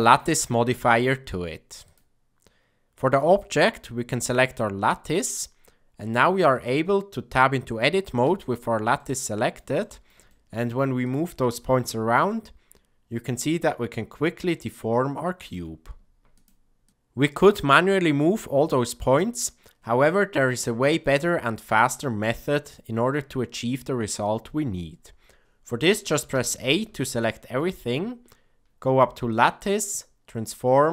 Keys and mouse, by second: 0.3-1.9 drag, 6.5 click, 8.2 Tab, 8.9 middle click, 9.7 ctrl+middle click, 10.2 shift+middle click, 11.8 g, 17.6 shift+click, 18.4 g, 20.6 shift+middle click, 21.2 middle click, 26.3 a, 26.9 shift+middle click, 29.4-30.9 drag.